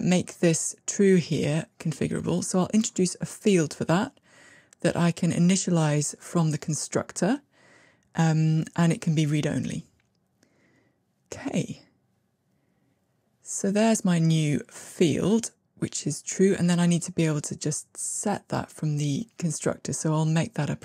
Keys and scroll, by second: 1.4 alt+super+f, 20.0 alt+super+p.